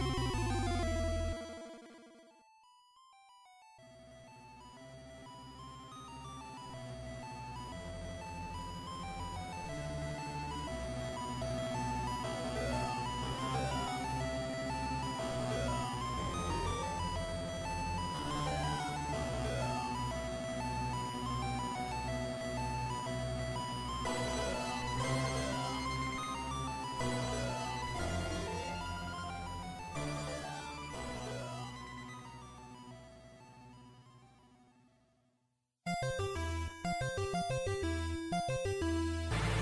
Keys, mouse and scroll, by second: 7.8 ctrl+Up, 14.4 click.